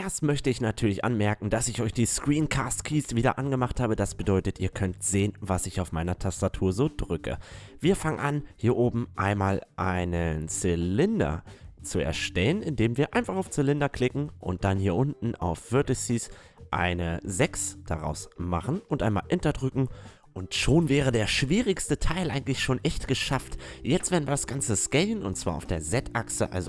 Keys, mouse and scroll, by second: 4.1 a, 4.9 a, 5.9 middle click, 8.3-10.5 drag, 10.7 middle click, 12.0-13.6 middle drag, 13.6-15.5 drag, 15.5-16.2 middle drag, 16.2-18.2 drag, 20.5 middle click, 22.2-23.1 middle drag, 23.1 s, 26.3 KP_5.